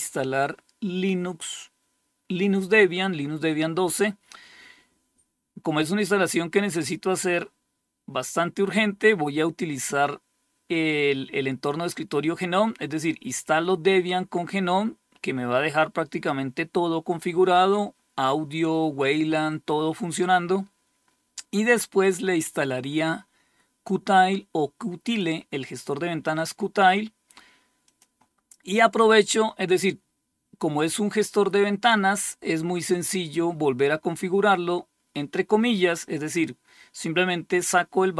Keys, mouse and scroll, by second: 21.1-23.3 scroll up 1, 23.3-24.6 drag, 27.3 click, 30.4 click.